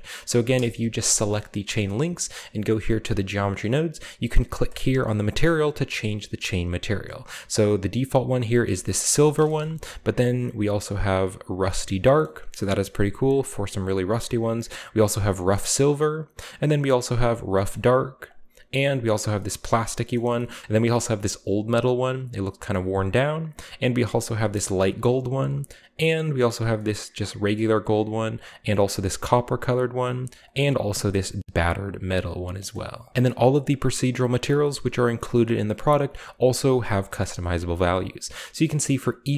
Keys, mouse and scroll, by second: 0.1 right click, 1.3-3.0 middle drag, 2.0-2.9 scroll up 1, 4.7-6.9 drag, 7.6 click, 8.7-9.3 shift+middle drag, 8.7-10.4 shift+scroll up 2, 9.3 a, 9.8 shift+middle click, 10.3 shift+click, 11.5 click, 11.8-12.6 middle drag, 12.2-13.2 scroll up 1, 13.0 middle click, 13.6 click, 14.7-15.2 drag, 15.2 middle click, 15.2 drag, 15.4 middle click, 15.6 middle click, 16.1 click, 17.2 click, 17.7-18.3 middle drag, 18.3 click, 18.4 click, 19.2-19.6 drag, 19.7 click, 20.2 middle drag, 20.6 click, 20.9-21.4 middle drag, 21.4-22.2 scroll up 1, 23.1-24.4 drag, 24.4-25.4 middle drag, 24.4 scroll down 1, 25.5 click, 26.4 drag, 26.7 middle click, 27.5-28.9 drag, 28.9 middle click, 29.6 click, 30.5-31.0 drag, 31.0-32.0 middle drag, 32.7 middle click, 35.9-36.7 drag, 36.1-36.7 scroll up 2, 37.1-37.8 middle drag, 37.8-38.4 right drag, 38.8 right click, 39.2 right click.